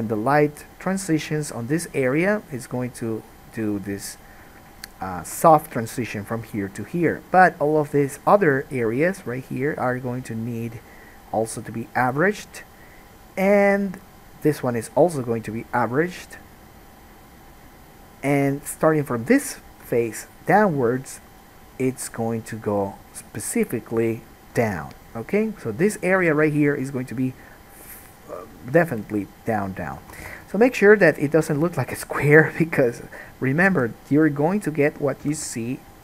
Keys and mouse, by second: 2.2 middle click, 2.4 shift+click, 2.6-5.4 shift+middle drag, 5.4-11.7 shift+right drag, 11.7-19.5 drag, 19.5 middle click, 19.6 click, 20.2 shift+middle click, 20.3 shift+click, 20.7 shift+middle click, 21.4 shift+click, 21.5 shift+middle click, 21.6 shift+click, 21.9 shift+middle click, 22.0-23.4 shift+right drag, 23.4 shift+middle click, 24.0-28.5 shift+right drag, 28.5-36.0 drag, 30.2 alt+a, 30.4 1, 30.5 middle click, 30.5 right click, 31.7 g, 33.5 middle click, 33.5 right click, 33.8 g, 35.2 middle click, 35.2 right click, 35.4 g.